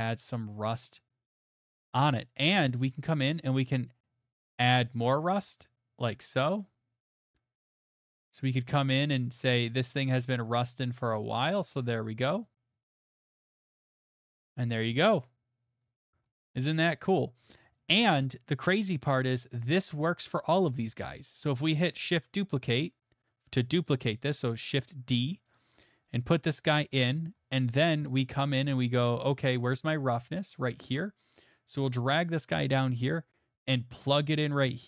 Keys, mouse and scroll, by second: 1.2 click, 1.8 click, 3.2 click, 5.2 click, 7.6 click, 11.1 click, 11.8 middle click, 11.9 scroll, 14.9 scroll, 16.0 scroll, 16.6 middle click, 17.3 middle click, 17.4 middle click, 17.4 middle click, 17.5 middle click, 18.1 middle click, 18.6 middle click, 19.9 click, 20.3 middle click, 21.7 middle click, 21.9 middle click, 22.6 d, 25.5 click, 26.6 middle click, 27.2 middle click, 27.3 middle click, 27.4 middle click, 27.4 middle click, 28.6 middle click, 28.7 middle click, 28.7 middle click, 29.7 middle click, 32.4 right click, 34.1 click.